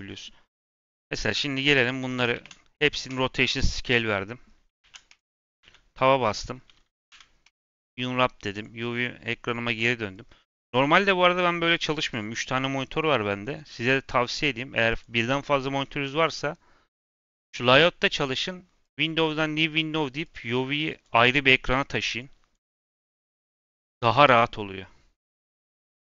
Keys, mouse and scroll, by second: 0.1 scroll up 1, 0.3 middle click, 0.9-1.5 scroll up 2, 1.5 click, 2.0 middle click, 2.3 ctrl+a, 3.9 middle click, 4.7 ctrl+a, 5.3 Tab, 5.5 a, 6.2 middle click, 7.0 u, 8.5 click, 10.2-13.1 drag, 14.8-17.4 drag, 18.7-26.1 drag.